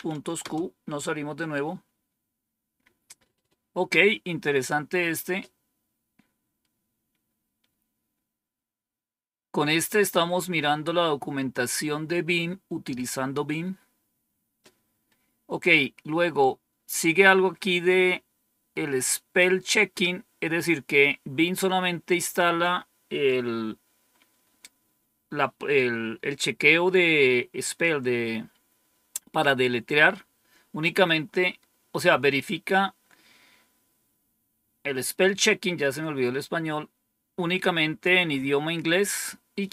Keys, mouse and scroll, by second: 0.0-0.3 typing, 7.7 scroll down 1, 14.0-14.8 scroll down 1, 39.5-39.7 scroll down 1.